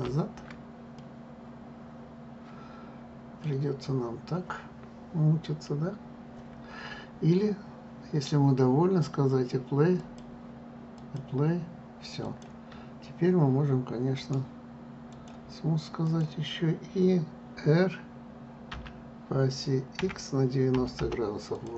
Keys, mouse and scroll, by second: 0.5 ctrl+z, 1.6-4.7 middle drag, 10.6 click, 12.9 click, 14.9-16.7 right drag, 16.7 click, 19.4 r.